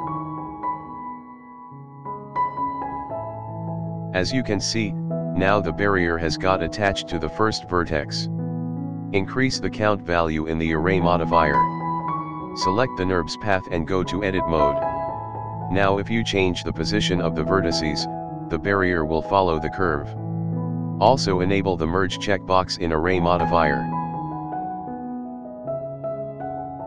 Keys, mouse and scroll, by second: 6.7-7.5 scroll up 1, 7.5-8.0 scroll up 2, 8.0-8.4 scroll down 1, 8.4-9.4 drag, 9.5-9.8 scroll down 2, 9.7 scroll up 1, 9.8 middle click, 10.2-11.0 scroll down 2, 11.3 click, 12.0 scroll up 1, 12.2-12.8 middle drag, 13.2 KP_7, 13.5 scroll down 2, 13.8 shift+middle drag, 14.5 click, 15.6-16.0 scroll down 2, 16.1 scroll up 1, 16.5 click, 17.0 g, 19.1 click, 19.6 g, 20.6 click, 21.1 g, 22.1 click, 22.6 g, 24.1 scroll down 1, 24.4 shift+middle drag, 24.6-25.1 scroll up 1, 25.2 click, 25.6 g, 26.5 click.